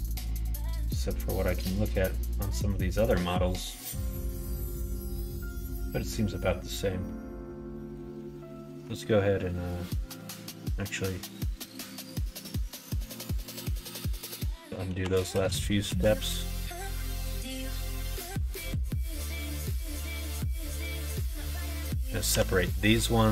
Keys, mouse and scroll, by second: 6.9 middle click, 8.3 middle click, 8.7 Tab, 9.3 middle click, 12.7 middle click, 13.4 middle click, 14.1 ctrl+z, 14.5 ctrl+z, 14.9 ctrl+z, 15.6 ctrl+z, 16.1 ctrl+z, 17.5 ctrl+z, 17.7 ctrl+z, 18.4 middle click, 19.4 middle click, 20.2 b, 22.2 p.